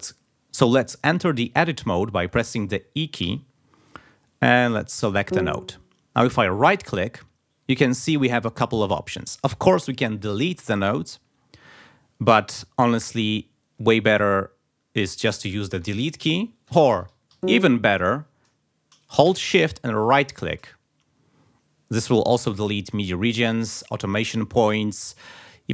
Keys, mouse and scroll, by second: 3.2 e, 5.2 click, 6.6 right click, 13.3 click, 15.8 Delete, 17.3 ctrl+z, 20.0-20.3 shift+scroll up 2.